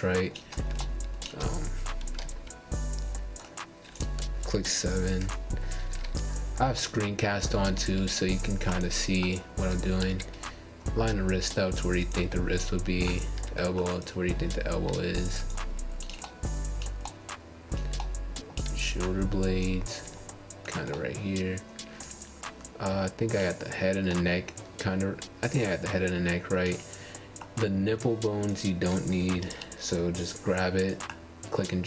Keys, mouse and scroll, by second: 2.5 Tab, 3.1 click, 3.7 click, 7.3-9.6 right drag, 9.6 click, 9.9-12.9 middle drag, 15.6-18.7 middle drag, 19.0-19.7 scroll up 3, 19.7-23.3 shift+middle drag, 24.9-25.5 middle drag, 25.9 click, 26.9 Tab, 27.4 click, 28.7 g.